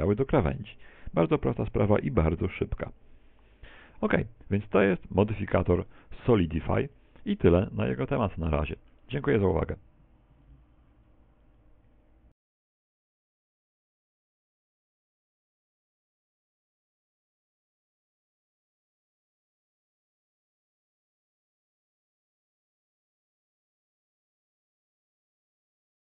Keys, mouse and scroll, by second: 7.3 click, 9.9 middle click, 10.3 middle click, 10.6 middle click, 21.0 middle click.